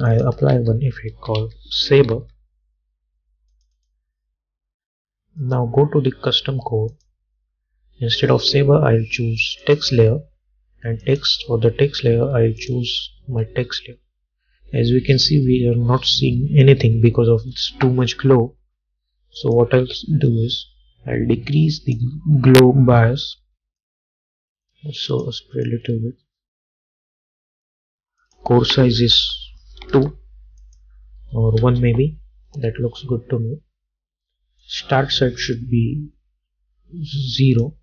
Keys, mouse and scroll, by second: 0.6 ctrl+a, 1.0-2.7 typing, 3.6 click, 7.0 click, 19.6-28.3 drag, 30.0 Return, 30.7 click, 31.7 Return, 34.7-37.8 drag.